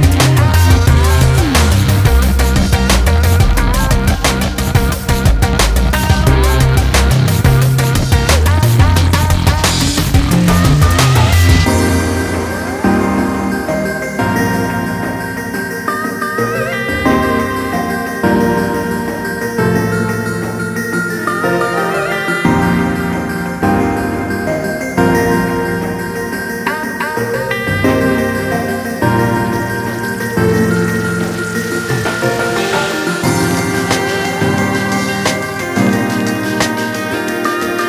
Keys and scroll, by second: 5.9 ctrl+j, 24.8 ctrl+space, 25.3 ctrl+space, 25.4-28.3 ctrl+space.